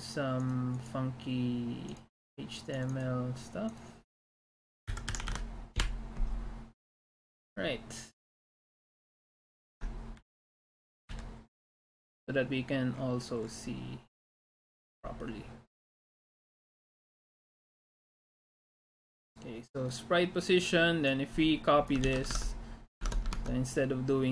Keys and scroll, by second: 4.9 Left, 5.2 Delete, 5.2 typing, 5.8 Return, 6.9 typing, 10.2 ctrl+=, 11.2 ctrl+=, 22.1 ctrl+c, 22.4 alt+Tab, 23.0 alt+Tab, 23.4 alt+Tab.